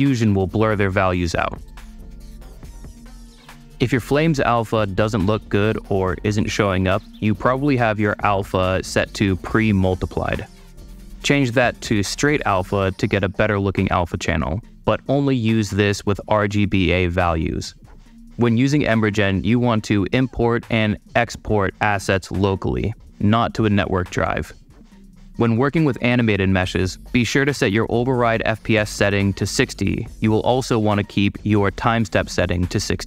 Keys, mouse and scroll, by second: 1.5 super+click, 3.2-4.2 super+drag, 6.3 middle click, 9.7 super+click, 23.9 super+click, 24.6 middle click, 24.8 super+middle click, 24.8 scroll down 2, 24.9 super+middle click, 26.5 super+click, 30.1 super+click, 31.1 click.